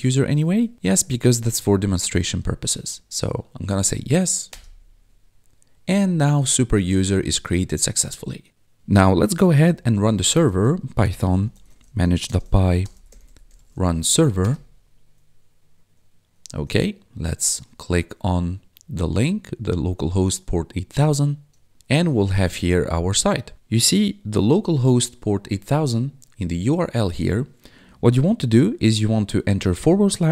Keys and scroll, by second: 2.8 y, 4.5 Return, 9.0-14.6 typing, 25.6 ctrl+4, 29.7-30.3 typing.